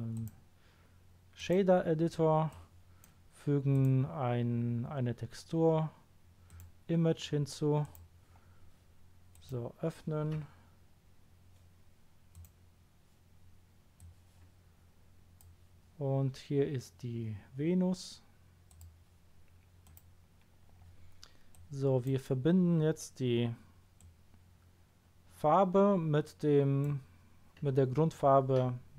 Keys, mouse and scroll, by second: 0.1 click, 1.3 click, 2.5-3.0 drag, 3.7 click, 6.5 click, 7.8 click, 9.3 click, 12.3 click, 13.9 click, 18.7 click, 19.8 click, 21.5-22.0 drag, 23.9-24.6 drag.